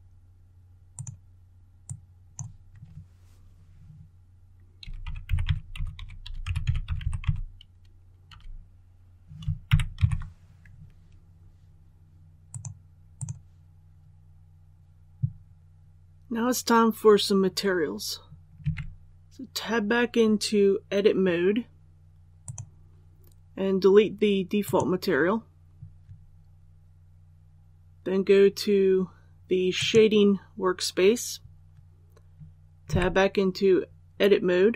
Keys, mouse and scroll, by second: 4.7-7.1 typing, 9.6-9.9 typing, 12.4 click, 18.5 Tab, 22.3 click, 32.8 Tab.